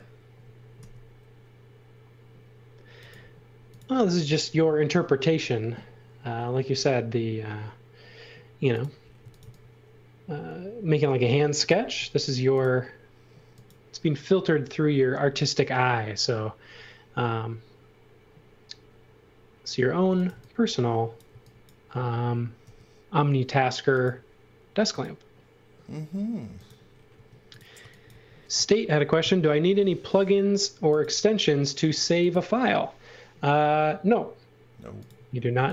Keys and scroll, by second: 0.7 r, 9.2 v, 11.8 space, 19.8-21.3 typing, 22.6 r, 27.1 space, 27.8 x, 28.1 v, 29.8 r, 35.3-35.7 typing.